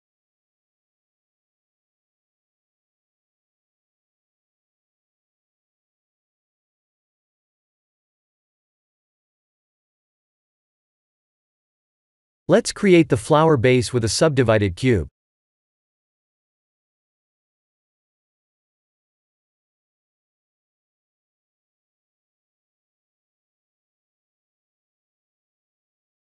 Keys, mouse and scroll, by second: 0.6 middle click, 0.8 click, 1.1 shift+z, 1.6 middle click, 6.6 middle click, 6.7 middle click, 7.1 middle click, 7.6 middle click, 8.3 KP_1, 9.0 click, 12.7 click, 13.7 shift+a, 16.4 ctrl+3, 16.8-17.2 scroll down 2, 17.6 Tab, 17.6-18.1 scroll down 1, 18.4 ctrl+r, 20.8 Tab, 21.9 right click, 25.7 s.